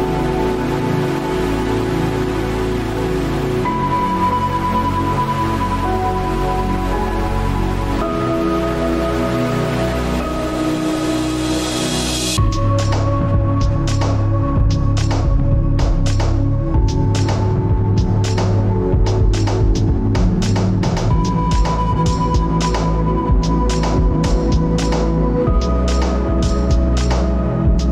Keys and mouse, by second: 1.7 ctrl+z, 3.3 ctrl+r, 5.7 ctrl+r, 8.7 alt+shift+click, 23.1-27.9 middle drag.